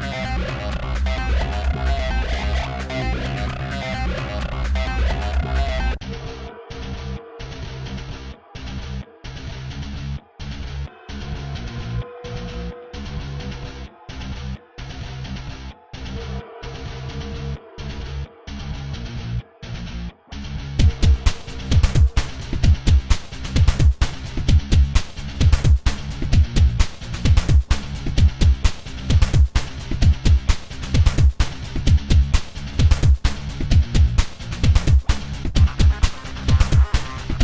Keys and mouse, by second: 0.0 a, 8.2-14.7 drag.